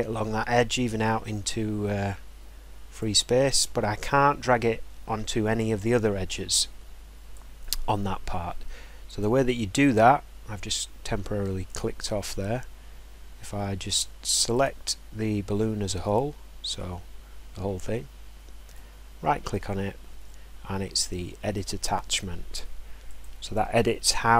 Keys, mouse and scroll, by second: 3.0 click, 7.3 click, 8.2 scroll, 9.2 click, 11.7 scroll, 14.6 click, 19.5 right click, 23.2 click.